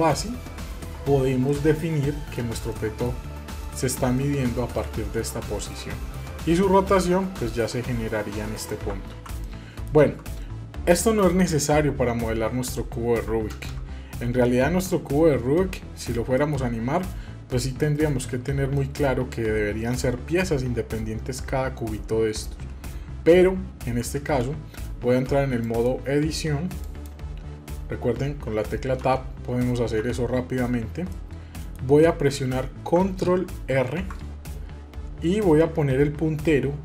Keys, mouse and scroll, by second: 1.5-2.4 middle drag, 2.4 scroll down 1, 2.7-6.1 middle drag, 7.0-9.1 drag, 9.1 ctrl+z, 9.4-13.0 middle drag, 13.6 ctrl+space, 15.6-16.1 middle drag, 16.4 shift+middle click, 18.8 middle click, 24.2 ctrl+space, 25.6-27.0 drag, 28.4 Tab, 29.0 Tab, 29.5 Tab, 30.0 Tab, 31.1-33.7 middle drag, 33.7 ctrl+r.